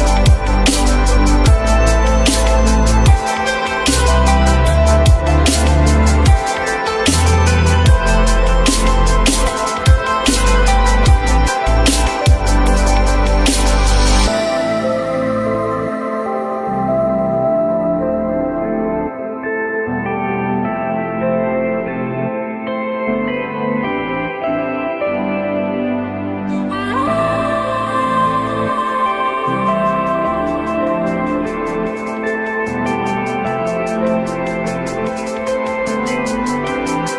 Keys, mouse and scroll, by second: 1.3 q, 2.0 alt+middle click, 5.1 alt+middle click, 6.6 alt+middle click, 7.4 alt+middle click, 15.7 ctrl+v.